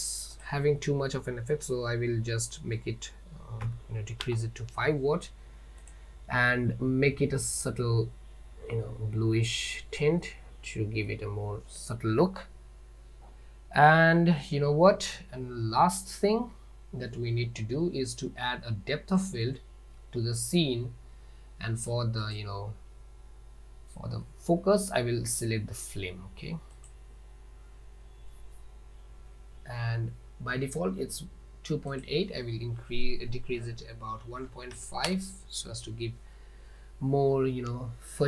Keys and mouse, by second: 0.9-5.4 drag, 4.3 middle click, 6.0 click, 7.9 click, 16.2 click, 19.3 click, 27.0 click, 27.1 middle click, 32.5-33.7 drag, 35.3 middle click, 35.4 click, 36.1-37.7 drag.